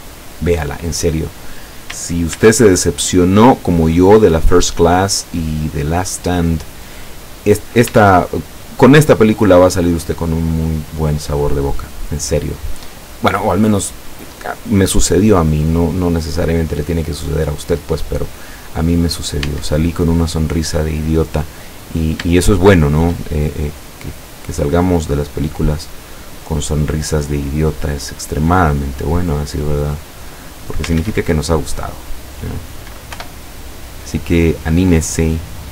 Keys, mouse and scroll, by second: 1.2 click, 2.4 ctrl+r, 3.0 ctrl+click, 5.1 click, 5.6-7.9 middle drag, 7.9 Tab, 9.1-10.4 middle drag, 11.0-11.6 middle drag, 11.6 scroll up 1, 11.8-14.8 middle drag, 16.6 middle click, 17.6 middle click, 17.9 scroll down 1, 18.5 click, 19.2 scroll up 2, 19.9 Tab, 19.9-20.4 middle drag, 20.4 scroll up 2, 21.2 click, 21.9-22.3 scroll up 3, 22.4-23.3 shift+middle drag, 23.4-23.7 shift+scroll up 3, 24.5 right click, 24.7 middle click, 26.3-27.0 middle drag, 27.0 scroll down 1, 27.5-28.3 middle drag, 29.2-30.9 drag, 31.0 ctrl+z, 33.2 o, 34.1 click, 34.7-35.4 scroll up 4, 35.6-35.7 scroll up 2.